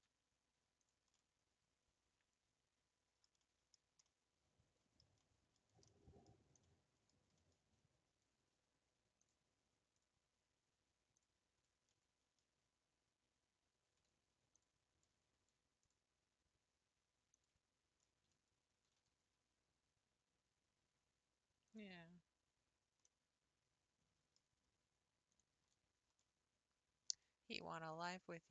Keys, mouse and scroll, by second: 1.1-3.7 middle drag, 3.7-4.1 scroll down 4, 4.1-5.8 middle drag, 5.8 scroll up 1, 5.9 middle click, 6.3-7.3 scroll down 7, 6.6 middle click, 7.3 middle click, 7.7-8.0 scroll up 6, 9.2 click, 9.9 click, 11.2 click, 11.8 scroll up 3, 12.3-14.5 shift+middle drag, 14.5 alt+click, 15.8 alt+click, 17.3 alt+click, 18.8 scroll down 2, 19.1 g, 23.0-25.4 middle drag, 25.4 click, 25.8 scroll down 3, 26.2-28.5 middle drag.